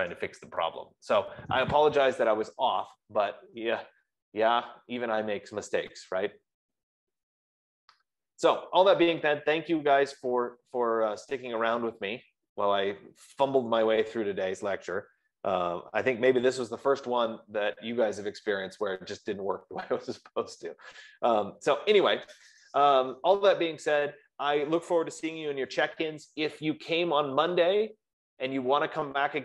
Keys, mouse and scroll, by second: 2.0 F15.